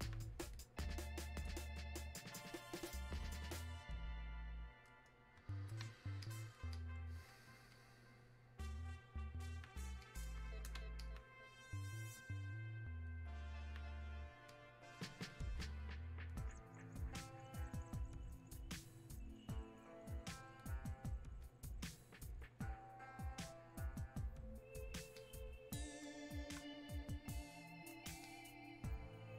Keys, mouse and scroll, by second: 5.5 shift+Num_Lock, 5.5 click, 19.6 click, 28.3 click.